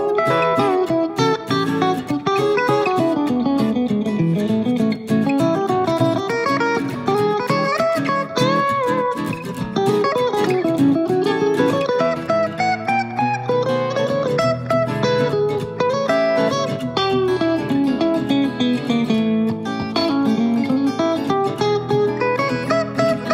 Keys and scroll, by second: 20.0 super+c, 20.3 super+v.